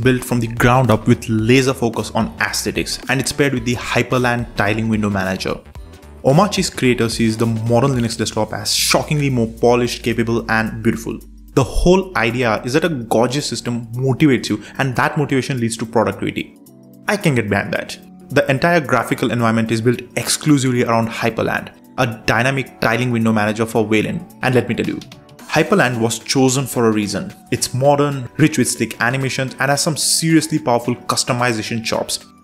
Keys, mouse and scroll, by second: 0.5 super+3, 2.6 super+Return, 4.0-6.2 typing, 7.0 Return, 8.2 super+space, 9.2-10.6 typing, 11.2 Return, 14.5 super+Left, 15.4 super+Right, 16.6 super+Left, 17.7 super+Right, 19.1 shift+super+Left, 20.3 shift+super+Right, 21.3 shift+super+Left, 22.0 shift+super+Right, 23.1 super+j, 24.4 super+j, 26.0 super+4.